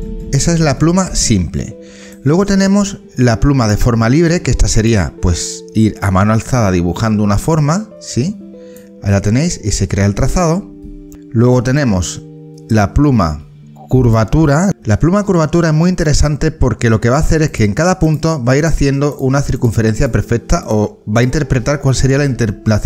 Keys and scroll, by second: 11.0 ctrl+z.